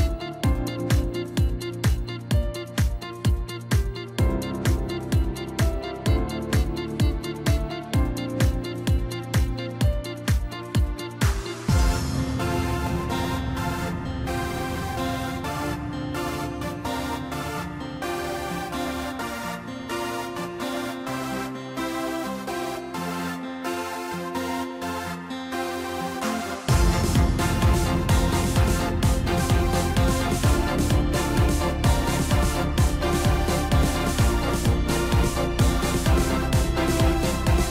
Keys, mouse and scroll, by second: 0.2-2.4 scroll down 7, 2.4-4.9 drag, 4.9-6.0 middle drag, 6.0 Tab, 6.5 middle click, 7.2 click, 7.8 click, 8.0 click, 8.4-9.6 middle drag, 9.6-10.8 scroll up 7, 10.8 click, 11.6-12.6 drag, 13.0 scroll down 2, 13.2-14.9 middle drag, 14.9-16.2 scroll down 5, 16.2-18.1 scroll down 2, 18.1-20.0 drag, 20.0-20.3 scroll up 2, 20.3-21.2 scroll down 2, 21.2 click, 22.5 Tab, 23.4 click, 25.1 click, 26.6-28.1 drag, 29.1 click, 30.4-30.8 drag, 30.8-31.7 middle drag, 31.7 drag, 32.4 click, 33.4-34.9 drag.